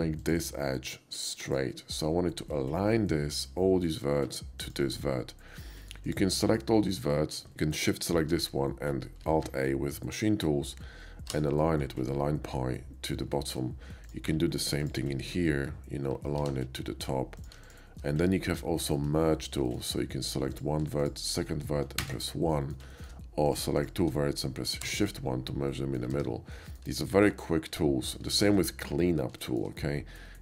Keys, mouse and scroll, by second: 0.2 shift+click, 1.4 click, 4.6 click, 6.0 click, 6.9 ctrl+click, 8.0 shift+click, 9.5 alt+a, 10.1 alt+a, 13.3 shift+middle click, 14.0 shift+click, 14.8 ctrl+click, 16.1 alt+a, 17.4 click, 17.7 shift+click, 18.5 shift+middle click, 19.1 KP_5, 19.4 middle click, 19.7 middle click, 19.9 middle click, 20.5 click, 21.0 click, 22.0 1, 22.5 middle click, 22.9 shift+middle click, 23.5 shift+click, 23.8 shift+click, 24.8 shift+1, 25.7 middle click, 26.1 ctrl+z, 26.5-26.8 middle drag, 27.1 shift+middle drag, 27.8-28.2 shift+middle drag, 28.4-29.8 shift+middle drag.